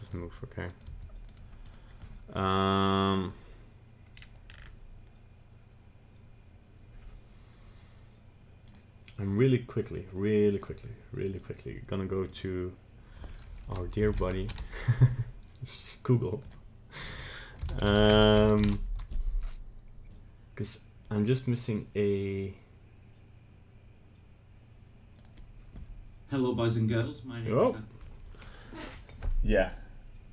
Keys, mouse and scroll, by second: 0.7 right click, 0.8 g, 1.6 right click, 4.1-6.1 scroll down 7.